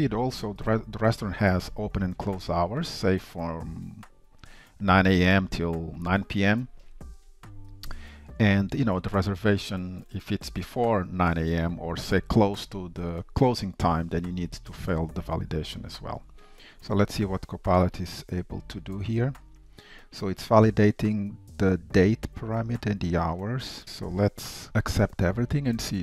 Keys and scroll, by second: 24.7 Tab.